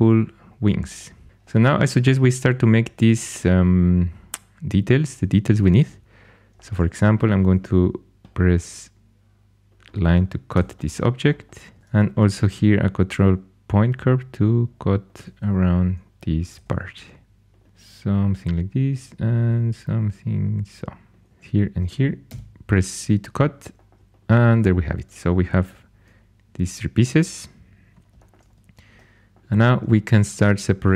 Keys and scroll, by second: 7.5 shift+a, 10.5 c, 12.3 ctrl+super+c, 15.4 1, 16.5 typing, 19.2 typing, 21.3 2, 22.2 c, 25.6 4, 29.4 2.